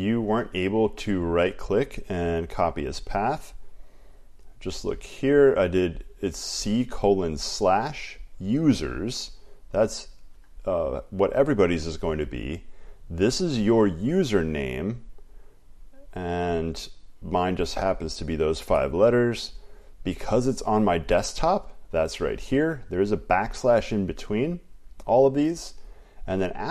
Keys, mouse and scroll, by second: 0.8 click, 1.2 right click, 4.1 click, 6.0 click, 6.5 click, 10.3 click, 15.0 click, 15.4 click, 17.0 click, 22.0 click, 25.3 click.